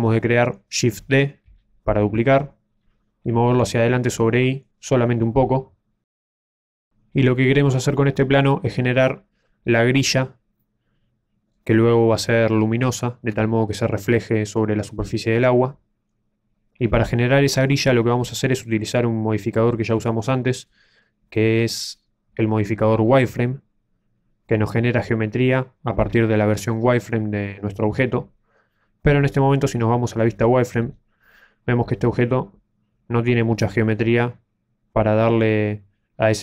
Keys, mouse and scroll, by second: 1.7 shift+d, 6.3 shift+middle click, 10.5 middle click, 30.8 z.